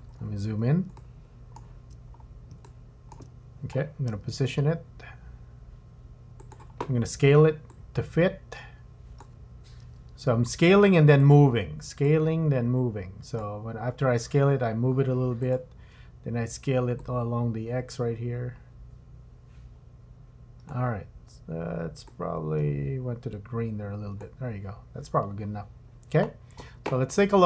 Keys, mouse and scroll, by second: 0.1-0.8 scroll up 6, 1.0 shift+middle click, 2.1 scroll down 2, 2.6 shift+middle click, 4.1 g, 7.7 click, 9.8 g, 12.1 click, 14.2 g, 17.0 click, 22.1 click.